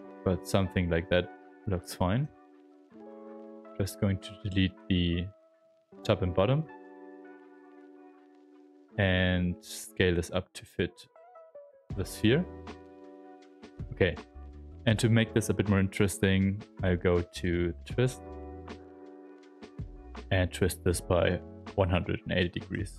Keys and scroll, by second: 0.1 shift+f, 1.4 shift+f, 2.2 w, 3.3 q, 6.5 alt+d, 7.5 s, 8.0 alt+t, 8.3 w, 8.9 shift+f, 9.4 alt+t, 12.2 q, 13.2 s, 14.1 w, 21.8 space, 22.7 w.